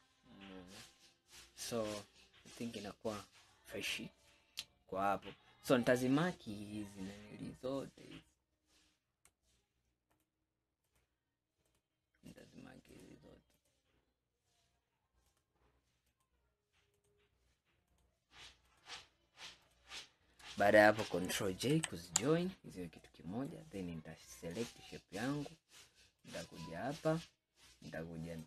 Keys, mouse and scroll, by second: 0.6-1.0 scroll down 2, 2.2 scroll down 3, 3.2 scroll up 2, 4.4-6.3 middle drag, 6.3-8.4 scroll up 5, 8.5-10.2 scroll down 2, 10.2 shift+click, 10.9 shift+click, 11.7 shift+click, 12.3 shift+click, 13.0 shift+click, 13.6 shift+click, 15.3 shift+click, 16.1 shift+click, 17.0 shift+click, 17.9 shift+click, 18.7 shift+click, 19.7 shift+click, 21.8 ctrl+j, 23.1-24.5 middle drag, 24.5 click, 26.3 click.